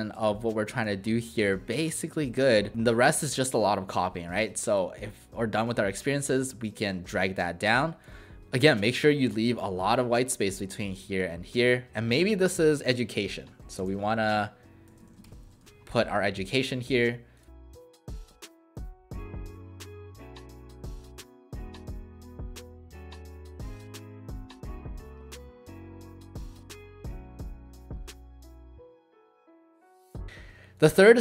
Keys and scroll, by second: 12.8 ctrl+a, 13.2-16.0 typing, 19.2-26.3 typing, 22.4 ctrl+a, 25.0 ctrl+a, 28.0-29.4 typing, 29.7 Delete.